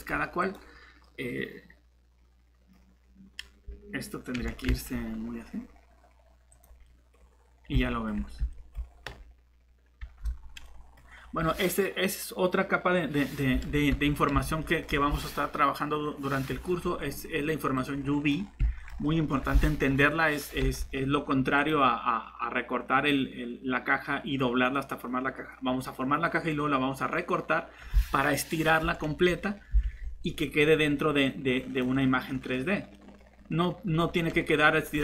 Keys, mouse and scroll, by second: 4.4 s, 4.7 z, 13.9 Tab, 14.9 typing, 29.8 alt+shift+Tab.